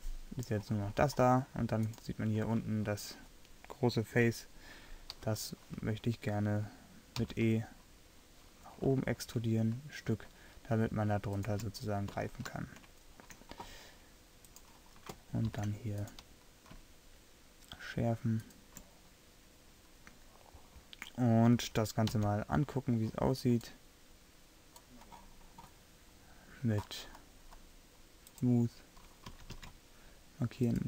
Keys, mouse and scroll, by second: 0.7-6.4 middle drag, 7.3 e, 11.9-14.5 middle drag, 15.6 ctrl+r, 22.2 z, 28.4 right click, 28.5 click, 29.4 a, 29.6 a.